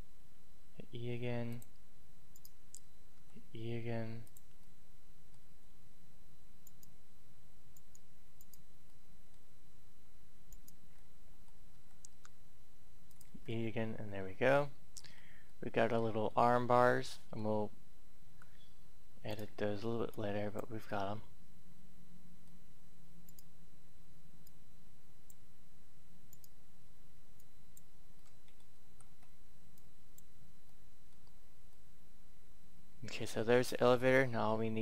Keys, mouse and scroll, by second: 1.4 click, 2.1 right click, 4.2 click, 4.6-5.9 middle drag, 6.5 right click, 8.8 middle click, 10.2 right click, 10.9 middle click, 11.3-11.7 scroll up 1, 12.9 click, 13.5-15.0 middle drag, 15.0 Tab, 15.4-17.3 middle drag, 17.3-18.2 scroll up 1, 18.2 scroll up 1, 19.1 right click, 20.1 click, 20.8 middle click, 23.2 right click, 24.4-25.9 drag, 26.1 right click, 27.3 click, 28.1 middle click, 29.7 click, 30.6 middle click, 31.4-33.7 scroll down 1, 33.7-34.8 middle drag.